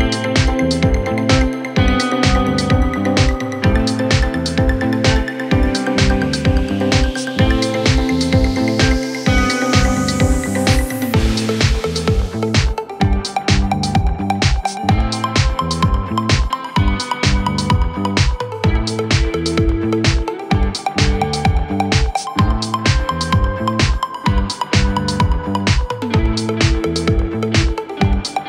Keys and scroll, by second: 7.6 F3.